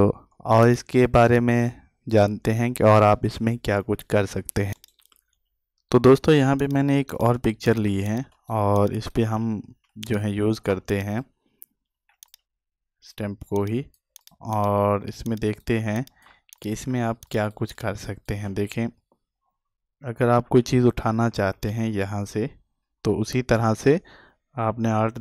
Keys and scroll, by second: 6.2 ctrl+space.